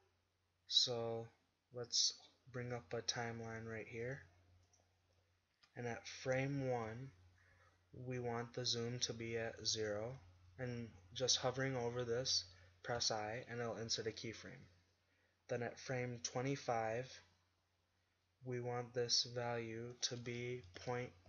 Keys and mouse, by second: 2.8 click, 6.8 shift+Left, 16.4-18.5 drag.